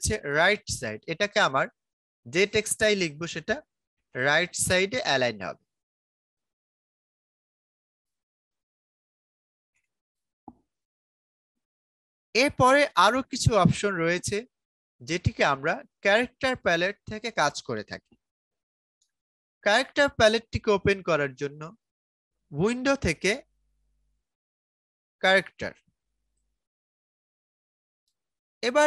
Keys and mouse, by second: 2.1-5.1 typing, 7.0 click, 7.1 click, 19.3 click, 22.4 click, 26.2 click.